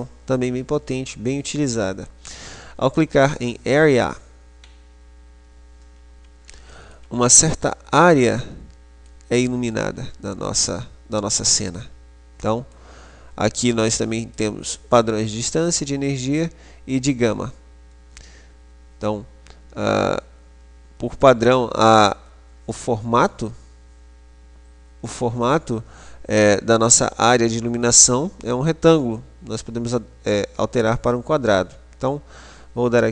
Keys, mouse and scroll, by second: 3.0 click, 6.7-9.3 middle drag, 10.0-13.7 middle drag, 13.7 click.